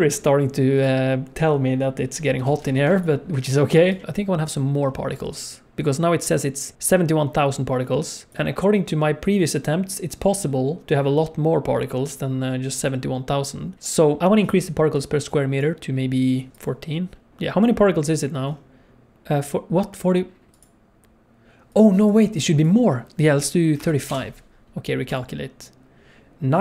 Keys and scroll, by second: 2.5 alt+a, 2.9 ctrl+s.